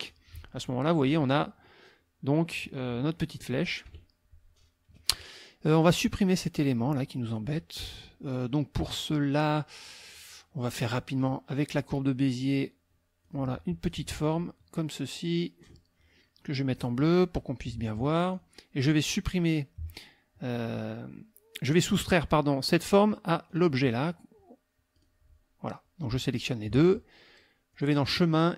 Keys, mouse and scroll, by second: 2.4 click, 3.9 KP_Subtract, 5.8 click, 11.2 click, 12.4 click, 13.2 click, 13.8 click, 14.2 click, 15.1 click, 16.8 click, 18.3 click, 19.0 click, 23.5 click, 24.9 click, 26.2 shift+click, 27.7 click.